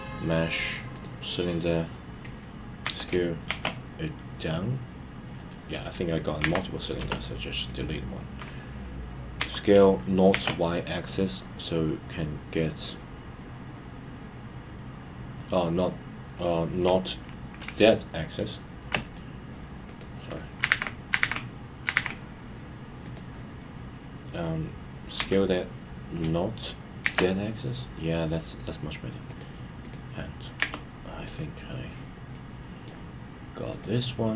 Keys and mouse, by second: 5.4 right click, 7.7 click, 15.4 right click, 19.0-19.7 right drag, 23.1 click, 29.3 click, 29.8 click, 32.3-32.9 middle drag, 33.8 click.